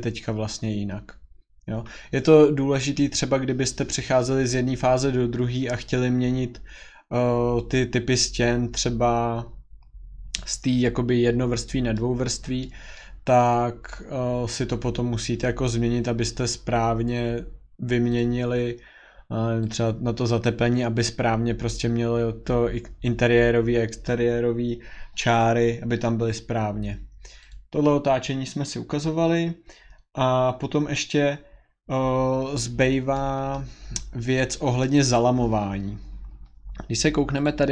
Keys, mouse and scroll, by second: 9.2 middle click, 9.4-10.4 scroll, 10.4 scroll, 11.1-12.0 scroll, 12.0-12.6 scroll, 13.0 scroll, 13.5-14.2 scroll, 14.8-15.1 scroll, 15.6 scroll, 16.4 scroll, 17.1-18.0 scroll, 18.2 click, 19.7 click, 27.5 click, 32.6-33.6 scroll, 33.6-34.8 scroll, 34.8 middle click, 35.1 click, 35.2 scroll, 37.4 click.